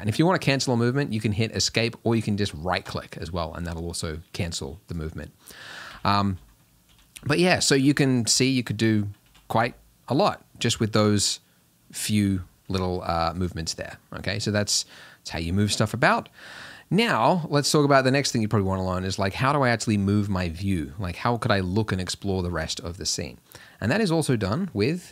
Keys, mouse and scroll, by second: 5.0-6.0 drag, 6.0 r, 9.2 r, 10.6 g, 15.3 g.